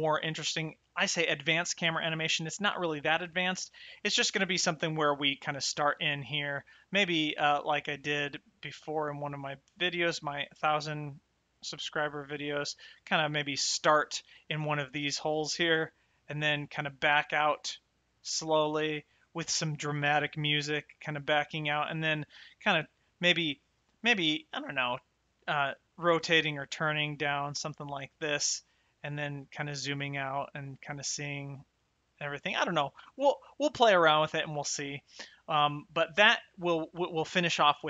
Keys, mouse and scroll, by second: 6.1 shift+middle click, 7.2 shift+middle click, 9.8 shift+right click, 11.0 shift+middle click, 12.2 shift+middle click, 13.3 shift+right click, 14.8 middle click, 22.4 shift+middle click, 24.0 shift+middle click, 24.7 middle click, 30.0 middle click, 34.8 shift+middle click.